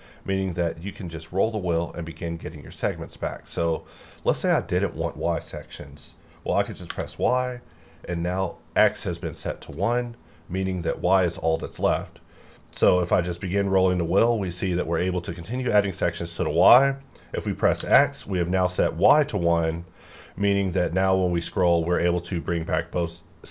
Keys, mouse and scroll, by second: 0.0-1.8 scroll up 1, 1.8-2.3 scroll down 1, 2.3-2.7 scroll up 1, 2.7-3.4 scroll down 1, 3.4-4.6 scroll up 1, 4.6-5.2 scroll up 1, 6.9 y, 12.5 scroll down 1, 12.7-13.6 scroll up 1, 13.6-14.0 scroll down 1, 14.0-14.4 scroll up 1, 14.4-14.7 scroll down 1, 14.7-15.1 scroll up 1, 15.1-16.8 scroll down 1, 16.8-17.8 scroll up 1, 17.8 x, 20.4-23.5 scroll up 1.